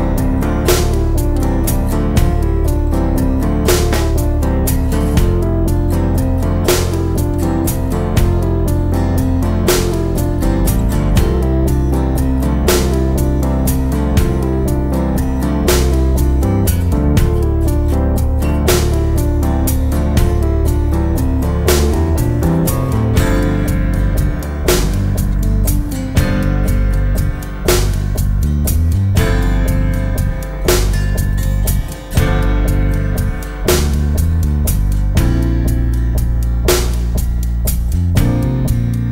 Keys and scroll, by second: 26.9 super+g, 35.3 shift+a.